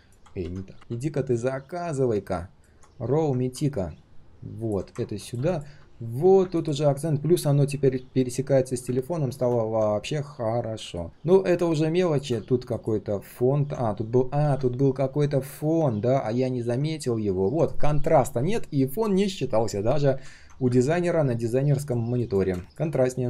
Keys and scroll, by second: 0.4 ctrl+z.